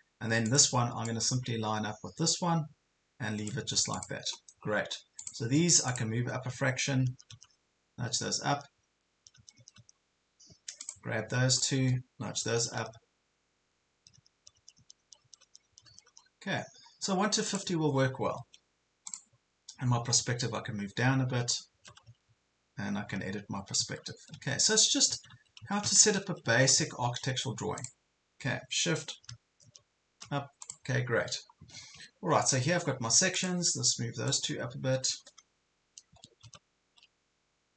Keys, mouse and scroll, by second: 4.4 scroll up 1, 5.2 click, 5.9 shift+click, 7.1 shift+Up, 7.3 shift+Up, 7.5-8.2 shift+Up, 8.3 typing, 10.8 click, 11.5 shift+click, 12.5-13.7 typing, 13.8 shift+Up, 16.6 scroll down 1, 17.5 click, 20.5-21.2 typing, 27.8 click, 29.7 shift+Up, 30.7 click, 32.1 ctrl+scroll down 1, 32.6 ctrl+scroll up 1, 33.3 click, 34.3 shift+click.